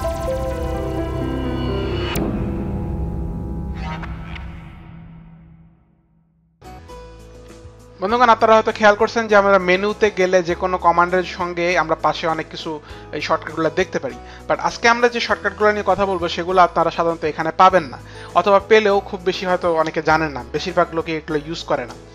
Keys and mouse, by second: 9.4 click, 18.0 click.